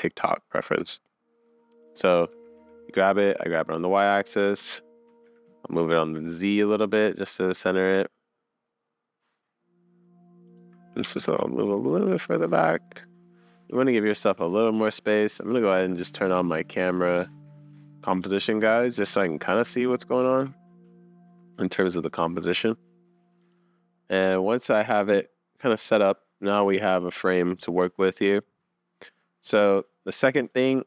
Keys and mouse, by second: 1.1-1.9 middle drag, 2.3 g, 5.0 g, 10.9 g, 14.7 super+s, 17.2 click, 18.2 click, 19.0 click, 22.2 click, 23.4 click, 30.4 click.